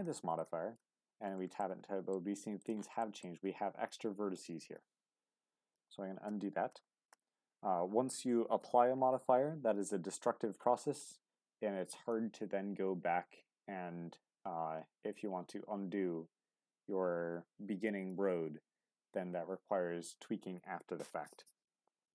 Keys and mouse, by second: 0.0 click, 1.6 middle click, 2.6 click, 3.0 middle click, 3.3 g, 4.3 click, 4.6 Tab, 5.7 ctrl+z, 7.5 ctrl+z.